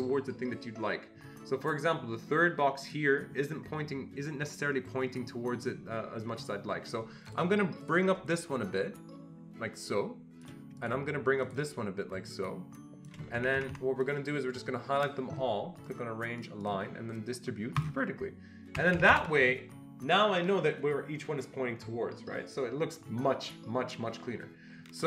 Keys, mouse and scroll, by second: 2.8-5.6 shift+drag, 7.3 shift+click, 7.8 click, 8.3-11.5 shift+drag, 11.5-13.7 shift+drag, 13.4 Escape, 13.6 Escape, 13.7 Escape, 14.0-16.4 drag, 16.4-17.7 drag, 18.7 Escape, 18.9 Escape, 19.1 Escape.